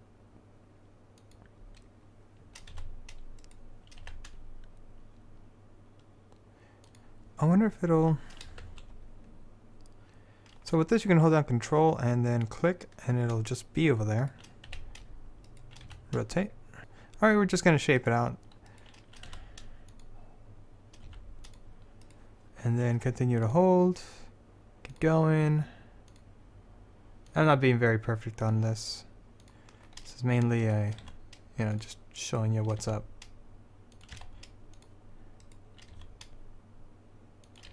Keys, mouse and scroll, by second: 2.9 r, 4.2 g, 8.8 shift+s, 12.6-14.8 drag, 14.8 g, 16.0 r, 19.4 r, 21.2 s, 23.6 click, 31.1 r, 32.9 r, 34.3 g, 36.1 r.